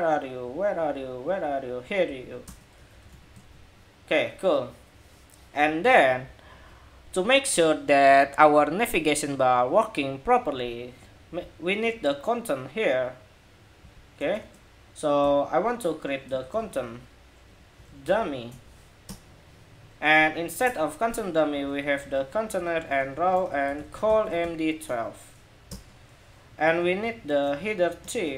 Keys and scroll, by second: 2.5 super+s, 2.8 super+Tab, 3.1 super+r.